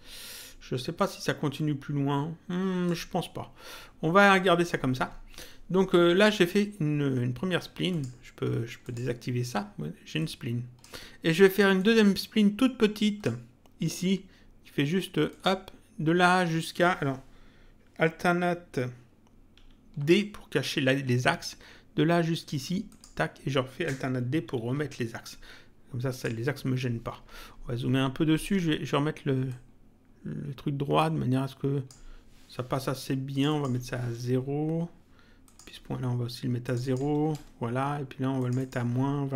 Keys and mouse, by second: 0.9 click, 7.8 click, 10.1 click, 11.7 click, 15.3 click, 19.5 alt+d, 22.9 click, 24.5 alt+d, 26.1 click, 29.4 click, 33.3 click, 34.1 Return, 35.4 click, 36.6 click, 37.3 Return, 38.3 click.